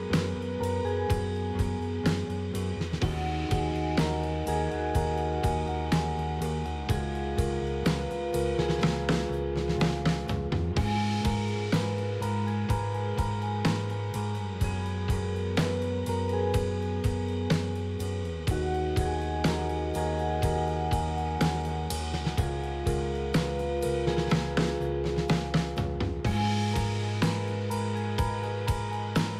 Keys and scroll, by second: 1.4 F3, 1.6 s, 2.0 f, 2.1 F3, 3.3 F3, 4.4 F4, 10.6 ctrl+z, 13.1 s, 16.8 ctrl+z, 17.3 z, 25.1 s, 28.1 p, 28.6 ctrl+c, 28.6 ctrl+v.